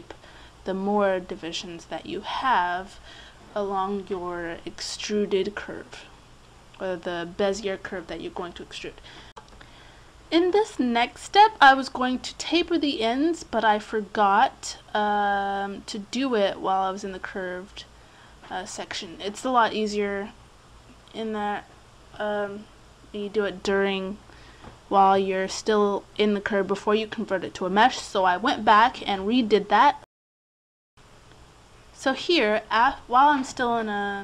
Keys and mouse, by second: 2.6 click, 3.5-8.0 middle drag, 8.0 right click, 8.2 middle click, 9.2-10.6 right drag, 10.6 middle click, 12.6-15.8 middle drag, 15.8 alt+s, 16.6 middle click, 17.6 click, 18.4 alt+s, 20.7 click, 21.1 ctrl+z, 21.9 click, 23.4 Tab, 23.8 x, 25.8 click, 27.3 click, 27.9 right click, 28.2 middle click, 28.6 click, 28.8 middle click, 29.0 right click, 30.5 click, 31.3 right click, 31.7-33.6 drag.